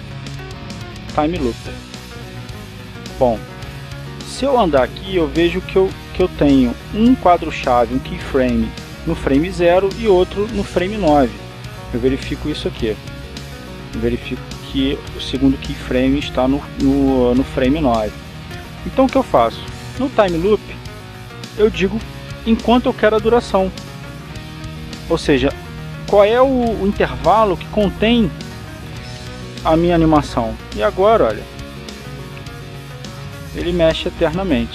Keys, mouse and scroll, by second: 3.5 click, 5.0 click, 6.0-8.4 drag, 14.4 click, 20.6 click, 24.6 click, 29.2 9, 29.7 f, 30.6 Return, 31.9-34.7 drag.